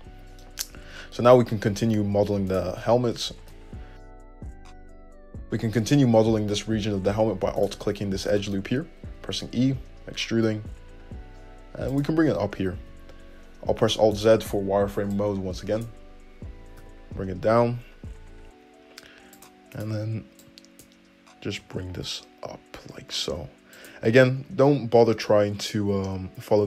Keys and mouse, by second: 0.1-2.7 middle drag, 1.1 `, 2.7 alt+click, 2.8-5.5 alt+middle drag, 4.4 `, 5.5 click, 6.3-7.8 middle drag, 7.8 alt+click, 7.9-14.4 alt+middle drag, 9.3 e, 13.0 alt+z, 14.4 click, 14.5 middle click, 17.0 g, 19.7 middle click, 20.0 click, 21.8 g, 22.0-24.1 drag, 24.1-26.6 middle drag.